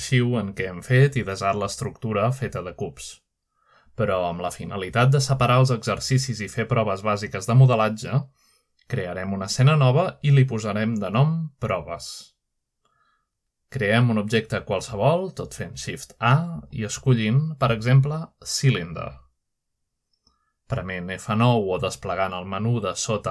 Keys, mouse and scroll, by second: 2.9 middle click, 6.3-7.9 shift+middle drag, 11.4-12.4 drag, 12.5 click, 13.5 click, 14.4-15.2 typing, 15.6 Return, 17.7 shift+a, 18.6-19.6 drag, 20.4 click, 22.2-23.3 scroll up 1, 22.8-23.3 shift+middle drag.